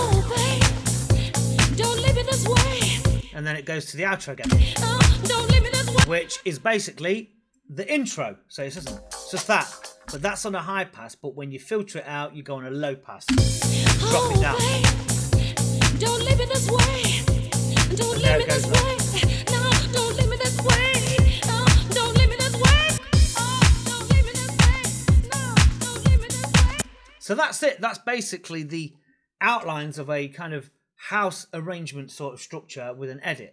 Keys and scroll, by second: 3.0 space, 4.3 space, 5.8 space, 8.7 space, 9.9 space, 13.2 space, 22.8 space, 26.6 space.